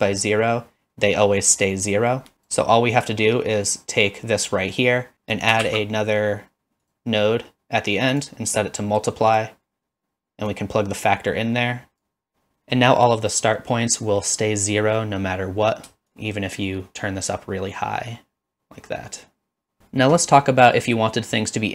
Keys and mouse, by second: 2.3 click, 5.3 click, 5.6 shift+d, 6.8 click, 8.2-9.4 drag, 10.5-12.1 drag, 16.1-19.8 shift+drag.